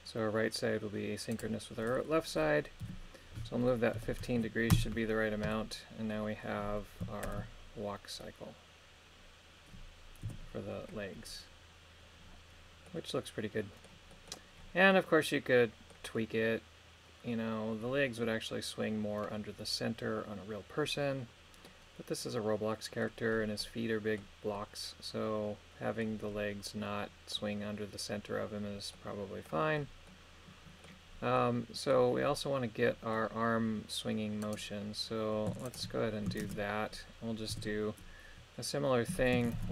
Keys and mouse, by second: 2.8 g, 4.0 KP_1, 4.4 KP_5, 4.8 Return, 7.3 ctrl+KP_1, 10.4 KP_3, 12.9-13.9 middle drag, 14.1 middle click, 14.9-15.9 middle drag, 21.7-23.0 middle drag, 23.6 middle click, 24.6-26.0 middle drag, 28.9 middle click, 30.1 middle click, 31.4 middle click, 32.9 middle click, 34.5 right click, 35.7 shift+right click, 36.5 shift+space, 37.5 KP_3, 39.6 shift+Left.